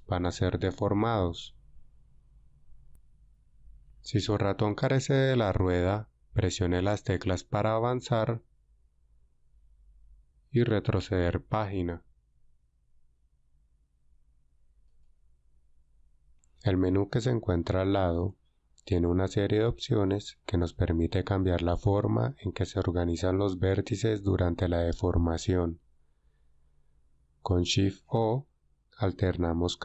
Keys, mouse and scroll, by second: 0.7-2.7 scroll down 4, 8.2 Page_Down, 12.0 Page_Up, 14.8-16.1 right drag, 29.2 shift+o.